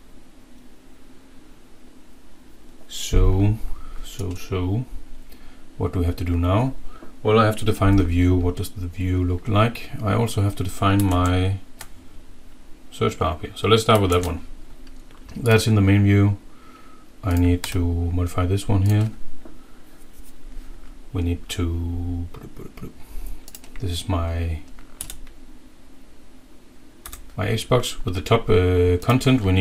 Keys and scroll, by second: 11.2 alt+Tab, 14.1 alt+Tab, 25.0 Right, 27.0 Down.